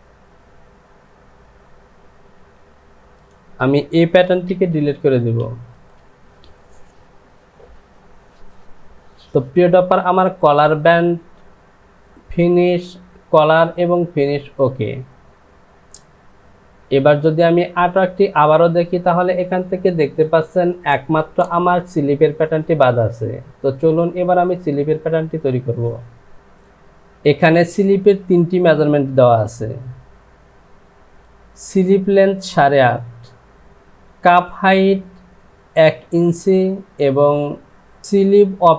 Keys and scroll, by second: 2.5 j.